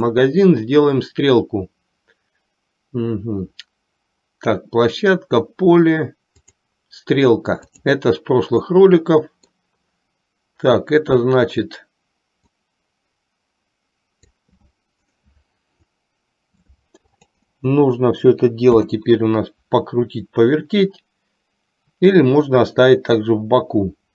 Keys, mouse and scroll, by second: 0.2-6.8 drag, 7.7 click, 8.7-9.7 middle drag, 8.7 scroll up 1, 12.6-14.6 drag, 17.2-19.2 drag.